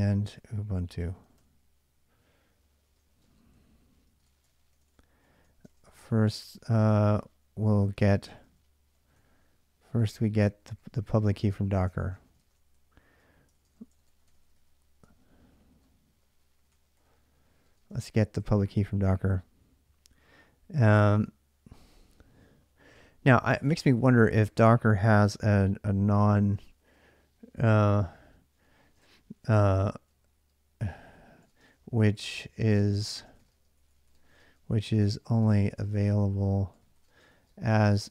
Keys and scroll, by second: 0.0-1.7 typing, 2.7-19.4 typing, 7.5 ctrl+[, 7.8 ctrl+[, 13.3 ctrl+[, 21.3 k, 21.5 k, 27.7 k, 27.9 k, 28.2 k, 28.8 shift+a, 30.9-38.1 typing.